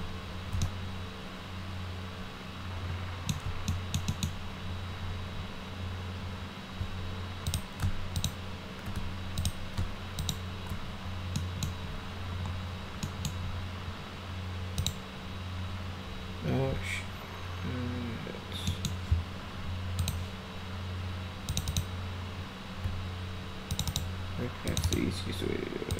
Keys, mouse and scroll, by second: 0.6-3.3 alt+middle drag, 3.7 middle click, 4.1 middle click, 7.5 ctrl+click, 8.2 shift+click, 9.4 ctrl+click, 10.2 shift+click, 11.4 middle click, 13.0 middle click, 14.8 click, 18.7 middle click, 20.0 click, 21.5 click, 21.7 click, 23.7 ctrl+click, 23.9 ctrl+click, 24.7 ctrl+click, 24.9 ctrl+click, 25.9 ctrl+click.